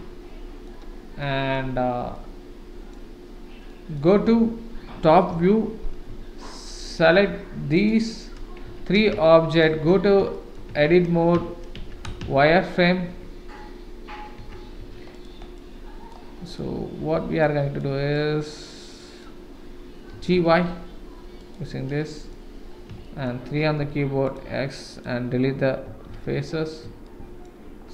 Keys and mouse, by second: 1.2-1.5 middle drag, 2.1-2.9 middle drag, 3.7 middle drag, 5.3 KP_7, 6.8 shift+middle click, 8.7 Tab, 9.2 shift+middle click, 10.3 shift+middle click, 10.7 Tab, 11.7 Tab, 12.2 shift+z, 13.0 Tab, 14.4 Tab, 15.1 click, 15.1 1, 15.5 click, 16.5 click, 17.4 click, 18.1 click, 19.0 click, 20.1 g, 22.0 middle click, 23.0 shift+middle click, 23.8 3, 24.2 click, 25.8 x, 27.0 shift+middle click.